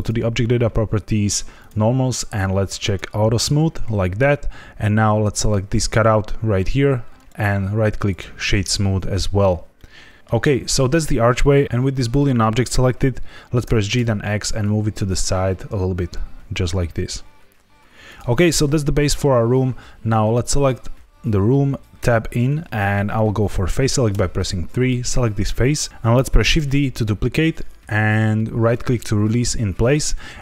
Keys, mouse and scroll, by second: 1.5 click, 2.8 click, 5.3 click, 7.1 right click, 9.7 middle click, 11.3 middle click, 13.6 g, 13.9 x, 18.0 click, 20.5 click, 21.9 Tab, 24.0 3, 24.7 click, 25.9 ctrl+z, 25.9 click, 26.5 shift+d, 28.6 right click.